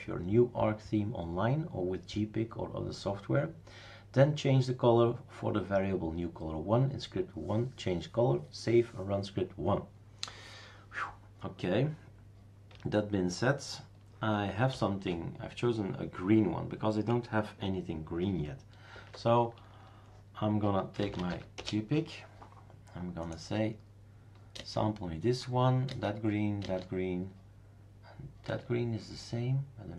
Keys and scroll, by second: 14.7 super+ç, 18.9 super+d, 20.4-21.8 typing, 24.5 space, 25.9-27.1 typing, 28.4 space.